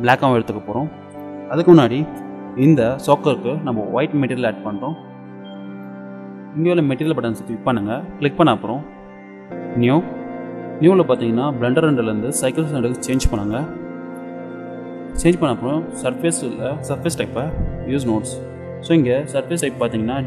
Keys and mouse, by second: 5.2-8.9 drag, 9.8-11.8 drag, 12.3-14.1 drag, 17.5-19.3 drag.